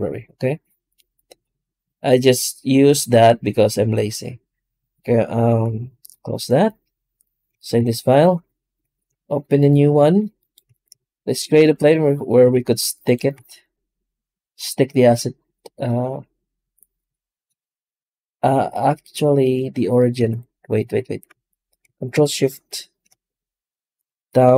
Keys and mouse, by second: 10.5 x, 10.8 shift+a, 12.3 s, 13.2 s, 19.9 right click, 20.0 x, 22.0 ctrl+shift+o.